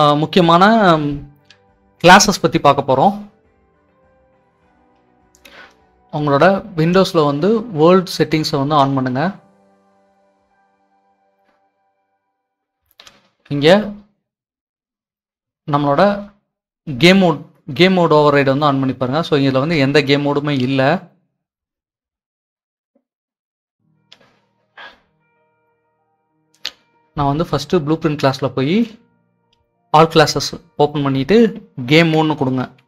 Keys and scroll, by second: 31.9-32.8 typing.